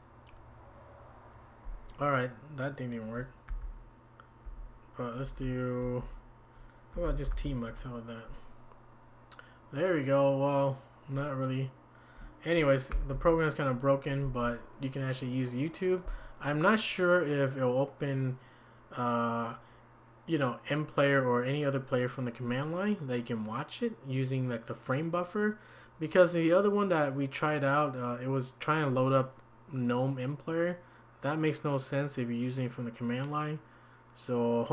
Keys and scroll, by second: 3.5 ctrl+c, 5.2 ctrl+c, 6.8-7.8 typing, 12.9 ctrl+c, 13.1 ctrl+c.